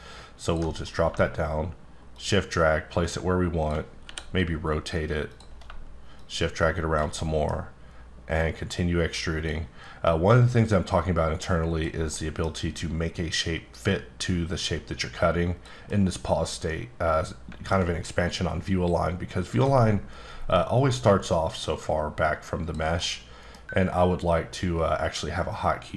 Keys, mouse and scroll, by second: 2.1 shift+click, 4.0 r, 5.3 click, 7.2 middle click, 8.4 click, 10.5 click, 12.1 middle click, 14.7 click, 16.5 middle click, 19.5 click, 20.5 click, 23.0 middle click.